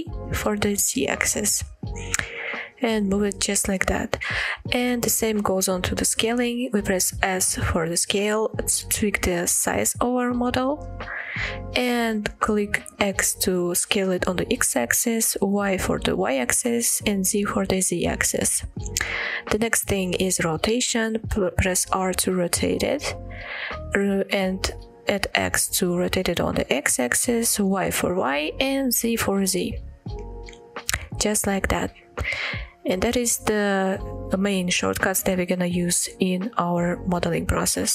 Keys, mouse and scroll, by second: 3.5-4.0 right drag, 4.0-4.8 middle drag, 7.7 s, 13.2 x, 15.4 y, 16.8 z, 18.2-18.5 right drag, 18.7-19.1 shift+middle drag, 19.3-19.6 scroll up 2, 19.7-20.1 shift+middle drag, 20.9 r, 24.6 x, 27.2 y, 28.8 z, 30.8-32.2 right drag.